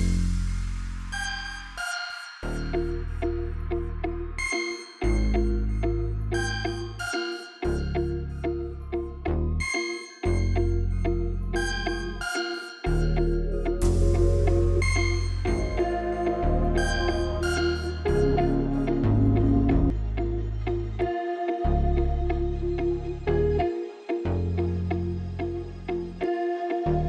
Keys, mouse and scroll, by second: 2.9 click, 7.3 click, 9.5-13.3 drag, 10.8 Left, 11.4 Left, 11.7 Left, 14.9 click, 16.5 click, 17.8 shift+a, 22.8 click.